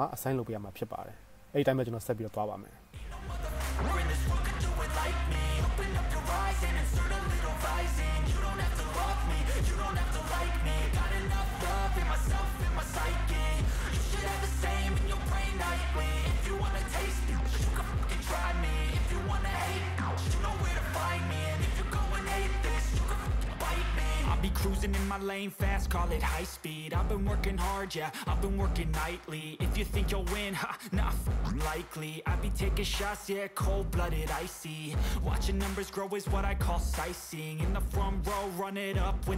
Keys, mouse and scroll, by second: 3.8-4.3 middle drag, 4.3 right click, 4.8 ctrl+s, 4.8 ctrl+c, 6.6-8.6 shift+middle drag, 8.6-9.0 drag, 9.0-10.4 shift+middle drag, 9.9 s, 10.1 ctrl+Tab, 10.4 click, 10.7-12.4 middle drag, 12.1 click, 12.1 right click, 12.4-15.6 drag, 13.9-15.6 middle drag, 13.9-15.6 right drag, 16.2 ctrl+Tab, 16.7-17.9 middle drag, 18.1 click, 18.6 BackSpace, 18.8 BackSpace, 19.0 ctrl+c, 19.7 KP_0, 20.1 click, 20.5 middle click, 20.9 right click, 21.1-21.9 middle drag, 21.9 click, 22.1 middle click, 22.6 ctrl+Tab, 22.7 ctrl+Tab, 23.0 click, 23.3 middle click, 23.6-25.0 drag, 25.0-29.4 middle drag, 26.3 ctrl+Tab, 29.4 right click, 29.5-30.8 shift+middle drag, 30.2 ctrl+c, 30.8 right click, 30.8 click, 31.5 middle click, 32.1 click, 32.5-33.5 middle drag, 33.5 click, 33.8 middle click, 34.3 ctrl+Tab, 34.6 middle click, 37.6 ctrl+Tab.